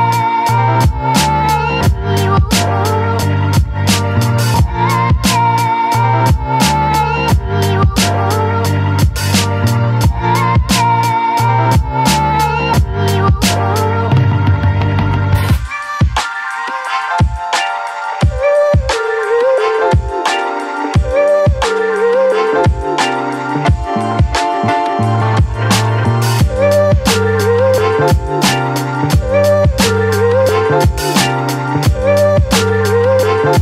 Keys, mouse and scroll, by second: 1.9 4, 2.8 click, 4.1 click, 6.9 click, 8.4 click, 16.8 Up, 20.7-24.7 drag, 25.7 right click, 26.3 click, 28.2-33.6 drag.